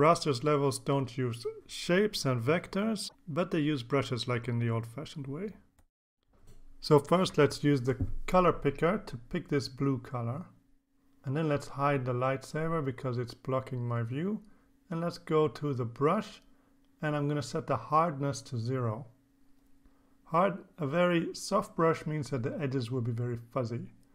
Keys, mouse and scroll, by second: 6.9 click, 7.7 click, 9.9 click, 11.6 click, 12.2 click, 14.1 click, 15.9 click, 17.2-20.1 drag, 22.3-22.8 scroll up 1, 23.3 click, 23.8 click.